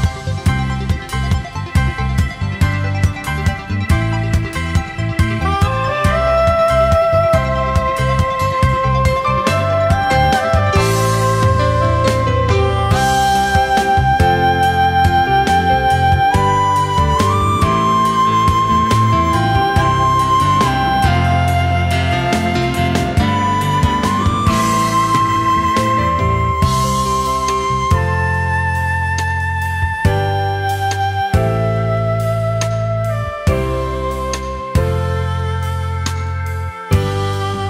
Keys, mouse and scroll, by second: 7.9 alt+scroll down 1, 8.1 space, 9.4 ctrl+shift+a, 9.9 alt+scroll down 1, 10.2 space, 11.8 alt+scroll up 1, 12.1 space, 15.2 alt+scroll up 1, 16.3 space, 19.9 space, 24.5 space, 32.8 alt+scroll down 1, 33.0 space, 34.5 alt+scroll up 1, 37.3-37.6 typing.